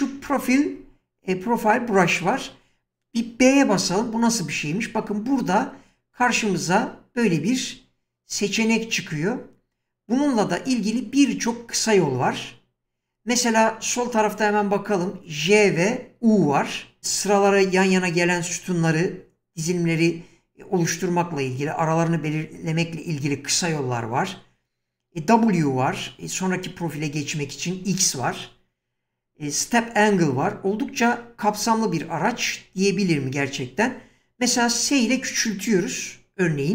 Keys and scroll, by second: 3.8 b, 35.0 s.